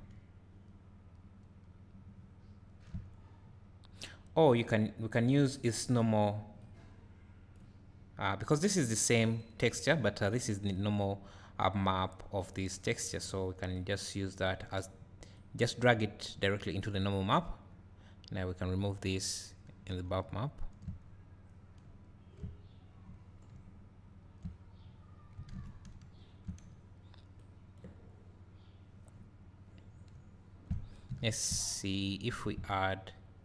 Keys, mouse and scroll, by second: 1.5-8.0 drag, 3.2-3.9 scroll up 2, 3.9-6.7 scroll up 1, 6.7-7.2 scroll up 1, 8.9-10.5 drag, 14.5-33.4 drag, 20.3 `, 21.1 scroll up 2, 23.1 scroll down 1, 24.6-25.9 scroll up 1.